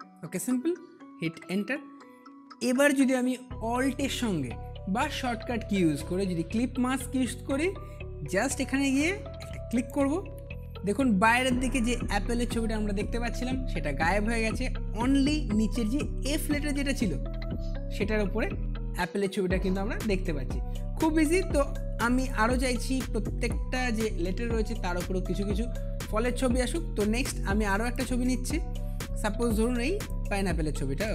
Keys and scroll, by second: 1.3 Return.